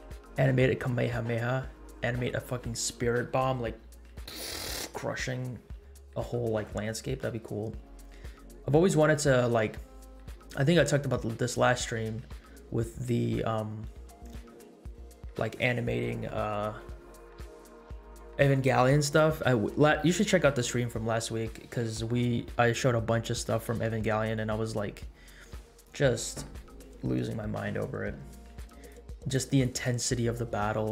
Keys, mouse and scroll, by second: 2.7 middle click, 6.3 scroll down 2, 7.3 scroll up 1, 12.0 scroll down 2, 12.5 scroll up 1, 13.0 space, 14.0 space, 15.0 space, 29.1 click.